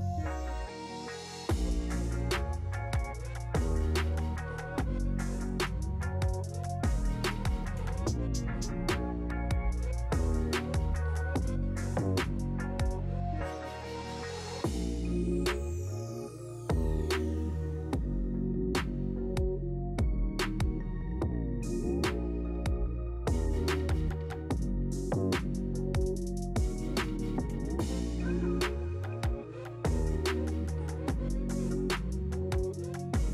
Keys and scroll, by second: 22.1 Escape.